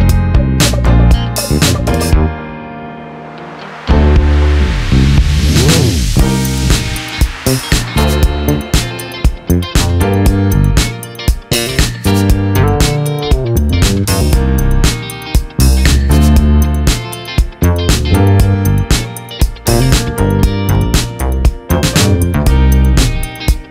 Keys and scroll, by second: 0.9 ctrl+=, 1.5 ctrl+t, 5.3 Return, 9.8 ctrl+t, 11.6 shift+Return, 20.6 ctrl+shift+-.